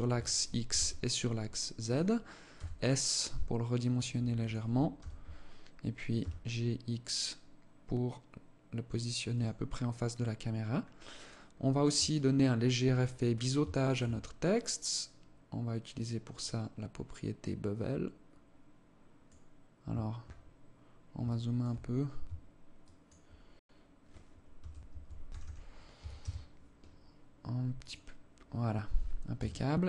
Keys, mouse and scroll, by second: 2.1 s, 4.5 g, 11.1 scroll up 2, 11.6 alt+click, 12.7-13.1 scroll up 3, 13.3 alt+shift+click, 13.7-14.3 scroll up 1, 14.3 scroll up 1, 16.0 click, 20.0-20.7 scroll up 5, 20.8 alt+shift+click, 22.4 shift+click, 27.3 click, 28.2 scroll down 1, 28.8 KP_0, 29.6 scroll down 1.